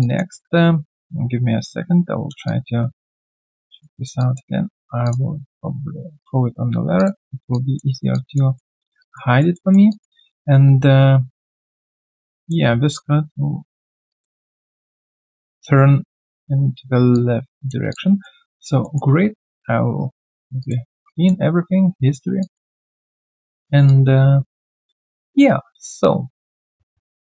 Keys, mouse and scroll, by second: 0.0 alt+click, 0.3-0.6 scroll down 3, 2.5 alt+click, 5.0 ctrl+click, 7.9 alt+right click, 8.1 alt+click, 8.5 alt+middle click, 9.0 alt+click, 9.3 alt+right click, 9.5 alt+middle click, 9.9 alt+click, 12.3 alt+click, 14.1 alt+click, 17.1 alt+click, 17.9 alt+click, 18.2 alt+middle click, 18.5 alt+click, 18.8 alt+middle click, 20.6 double click, 22.4 alt+click, 22.7 alt+middle click, 23.0 alt+click, 23.8 alt+click, 27.1 alt+right click.